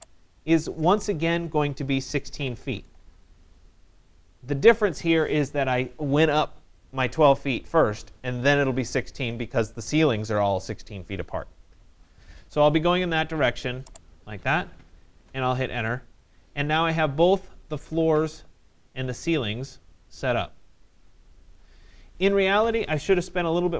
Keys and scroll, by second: 1.7 1, 2.3 6, 3.0 Return, 14.7 Return.